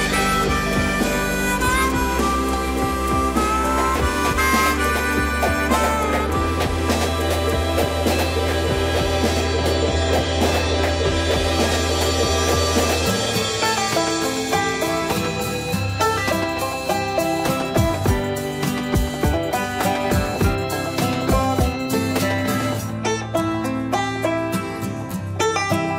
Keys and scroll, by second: 5.9 space.